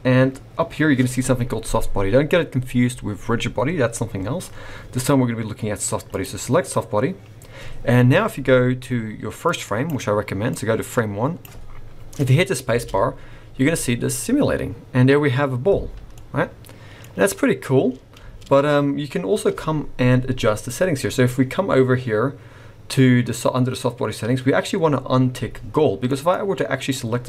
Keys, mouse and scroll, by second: 6.0 click, 9.4 click, 10.5 click, 12.7 space, 16.2 middle click, 18.2 space, 25.7 scroll down 3, 26.1 middle click, 26.3-26.8 scroll up 2, 26.8 click.